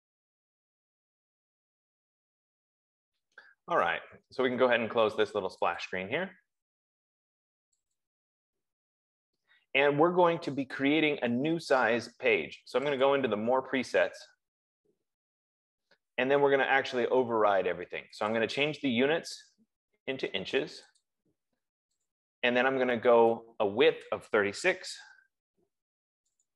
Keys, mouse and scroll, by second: 6.2 click, 8.4 click, 13.6 click, 18.9 click, 21.6 click, 22.7 click, 24.5 click, 24.7-25.7 typing.